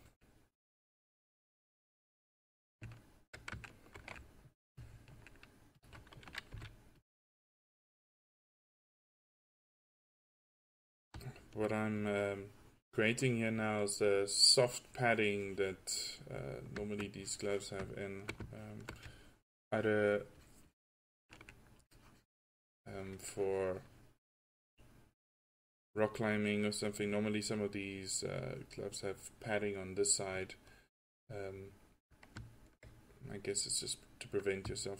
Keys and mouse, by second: 0.8 click, 1.3-4.9 drag, 6.6 f, 17.3-20.0 middle drag, 24.8-26.3 drag.